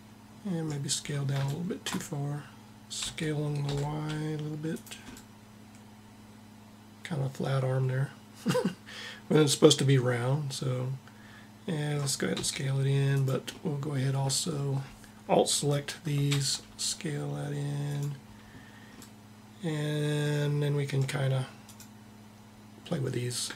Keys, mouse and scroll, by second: 0.7-2.7 middle drag, 2.7 s, 12.0 s, 13.2-15.0 middle drag, 15.4 click, 16.3 click, 16.3 s, 21.3-23.3 drag, 23.4-23.5 drag.